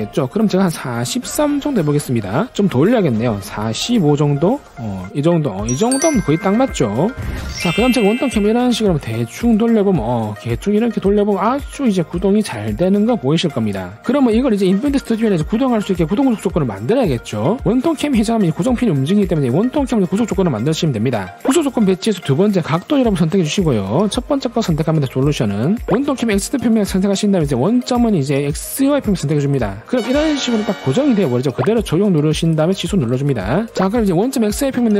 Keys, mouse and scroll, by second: 1.2 4, 1.5 3, 3.8 4, 4.7 5, 6.5 click, 8.9-9.8 drag, 10.4-11.3 drag, 11.7-12.4 drag, 12.8-13.3 drag, 13.7-14.0 drag, 23.7 click, 25.4 click, 27.7 click, 29.6 click, 32.6 click, 33.3 click.